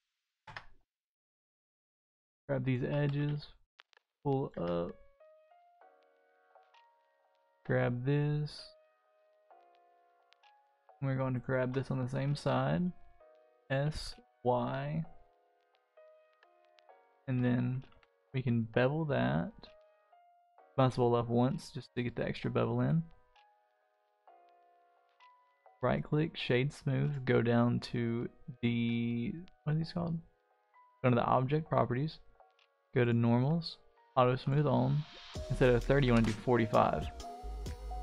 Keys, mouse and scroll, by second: 0.2 shift+middle drag, 0.4 Tab, 0.6-1.0 scroll up 2, 0.8 middle click, 1.8 click, 2.0 scroll up 1, 2.6 alt+click, 3.1 g, 4.5 Tab, 4.8-5.8 middle drag, 6.1 Tab, 6.9 alt+click, 7.4-7.7 scroll down 2, 7.7-10.3 middle drag, 10.7 scroll up 1, 10.7 middle click, 11.3 alt+shift+click, 11.9 middle click, 13.2 s, 16.1 click, 16.5 middle click, 17.0 ctrl+z, 17.9 ctrl+b, 23.5 Tab, 23.8-25.0 middle drag, 25.3 right click, 27.0 click, 33.0 click, 33.9 click, 34.4-36.1 drag, 37.0 click, 37.4-38.0 middle drag.